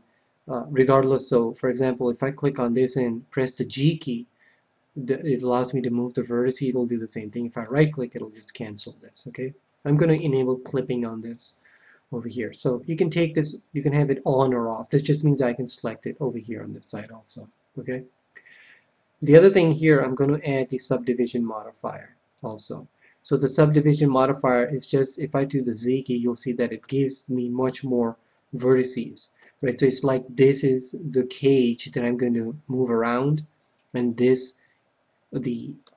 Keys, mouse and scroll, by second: 1.7-3.7 right drag, 3.5 g, 7.6-9.7 right drag, 10.0-11.8 drag, 16.8-18.5 drag, 19.1-21.0 drag, 21.0 click, 23.4-25.6 middle drag, 25.6 z, 25.9-30.5 middle drag, 35.3-35.9 middle drag.